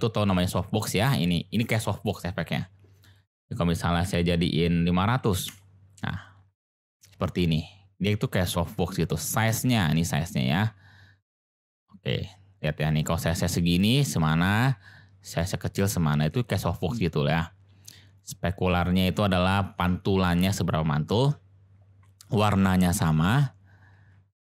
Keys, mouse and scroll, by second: 3.0-6.1 drag, 5.2 0, 9.3-11.2 drag, 11.2-13.6 middle drag, 13.6 click, 13.9-16.6 middle drag, 18.2-19.8 middle drag.